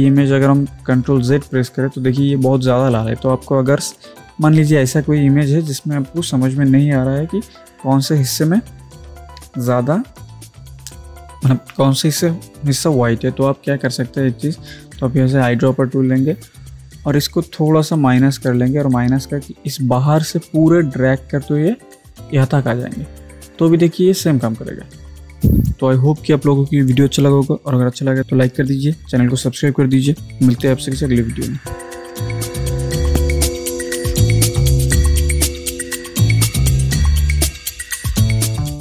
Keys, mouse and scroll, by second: 0.9 ctrl+z, 1.5 ctrl+z, 17.7 alt+Num_Lock, 18.0 alt+click, 18.0-25.2 alt+drag.